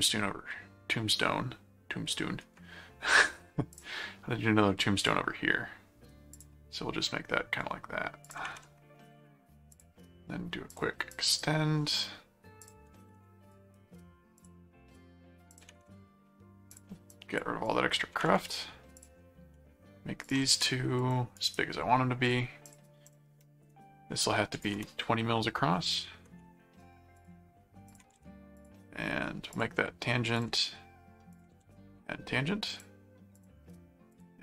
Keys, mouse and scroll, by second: 3.7 click, 5.0 click, 6.3 click, 8.2 click, 9.7 click, 10.7 click, 12.6 click, 13.5 right click, 14.4 click, 15.5 click, 16.7-18.2 drag, 19.0 ctrl+click, 20.2 ctrl+alt+click, 20.5 ctrl+alt+q, 21.0 click, 21.4 right click, 22.7 click, 26.6 scroll down 2, 27.2 ctrl+click, 27.9 ctrl+alt+click, 28.3 ctrl+alt+a, 28.6 alt+click, 29.5 click, 30.3 ctrl+click, 31.3 ctrl+alt+click, 31.6 ctrl+alt+a, 32.7 click, 33.4 ctrl+click, 34.1 ctrl+click.